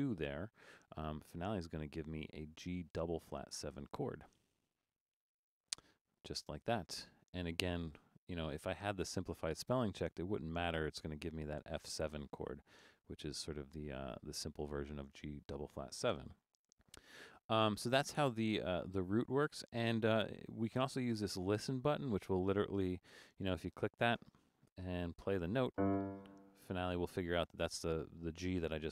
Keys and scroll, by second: 16.4 Return.